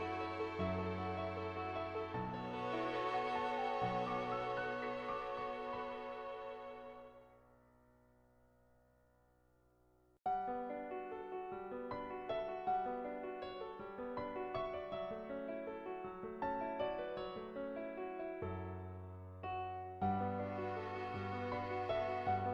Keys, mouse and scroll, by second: 0.5 ctrl+z, 1.5 /, 3.9 click, 5.0 click, 6.3-7.7 drag, 7.9 click, 8.4 click, 8.8 click, 9.7 click, 10.1-11.2 drag, 12.3 click, 13.2 click, 14.7-16.8 typing, 15.1 click, 16.0 ctrl+z, 16.3 click, 17.0 click, 18.4 ctrl+z, 18.6 ], 18.7 ], 18.9 click, 20.0 click, 20.3 click, 21.6 click.